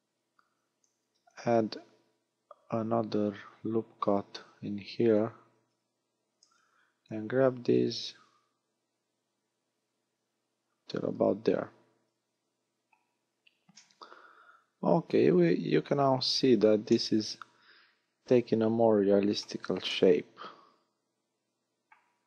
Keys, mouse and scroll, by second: 0.7 ctrl+r, 5.2 click, 5.6 a, 6.5 b, 7.8 click, 11.2-11.6 scroll down 6, 12.2-13.0 scroll up 6, 13.8 middle click, 16.4 scroll down 3, 17.0 middle click, 20.0 middle click, 22.1 a.